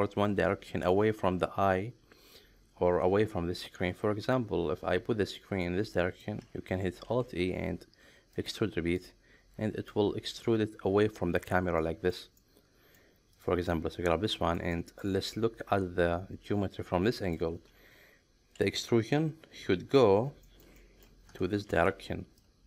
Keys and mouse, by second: 4.3-6.2 middle drag, 7.0 alt+e, 8.9 middle click, 11.8 shift+middle click, 12.4 middle click, 13.7-15.0 middle drag, 15.3-17.3 middle drag, 18.8-20.0 middle drag, 20.4 shift+middle click, 20.8 middle click, 21.7 ctrl+shift+3.